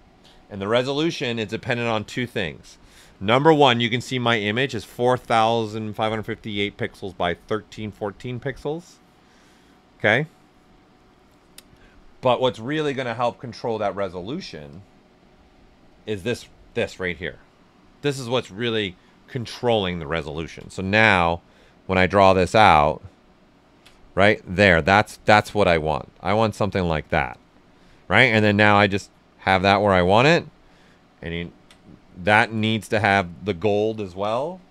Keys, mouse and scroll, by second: 13.0-21.2 drag, 13.0 typing, 21.2-22.6 ctrl+drag, 22.6 ctrl+space, 25.9 click, 27.9 w, 28.7-30.2 drag, 30.2 q, 31.4 ctrl+click, 32.2 ctrl+z, 34.2 click.